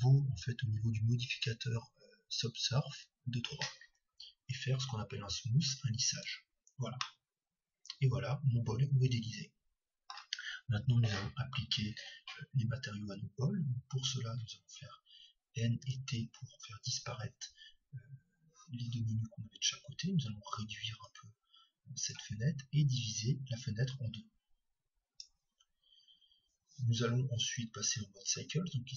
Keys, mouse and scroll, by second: 4.8-5.7 scroll up 1, 5.7-6.7 scroll up 1, 6.1-8.0 drag, 6.7-7.3 scroll up 1, 7.3-9.0 middle drag, 15.6 n, 16.0 t, 22.6-25.6 drag.